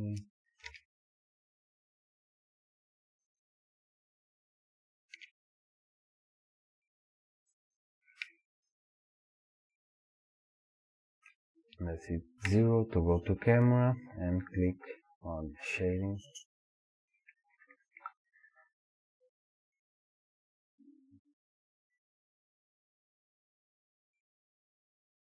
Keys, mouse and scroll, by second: 5.2 r, 8.2-14.7 middle drag, 12.5 KP_0, 14.7 click.